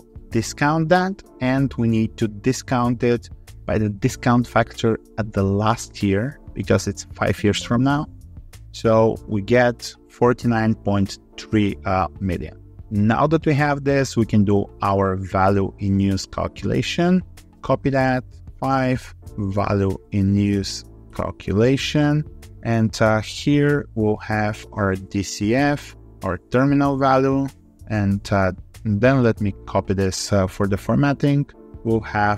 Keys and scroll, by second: 16.4 ctrl+c, 17.7 ctrl+v, 18.3 ctrl+Left, 27.6 ctrl+Up, 28.6 ctrl+z, 29.5 ctrl+v.